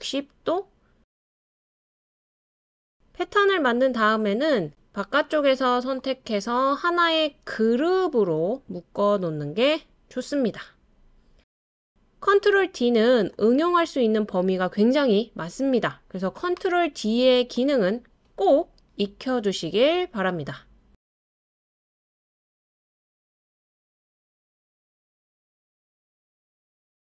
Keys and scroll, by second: 1.2 super+d.